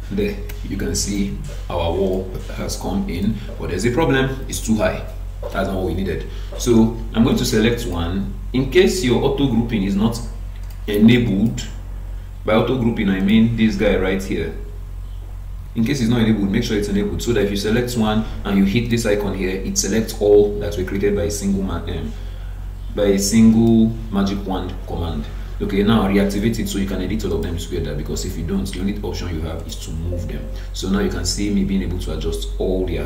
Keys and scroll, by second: 6.6 Escape.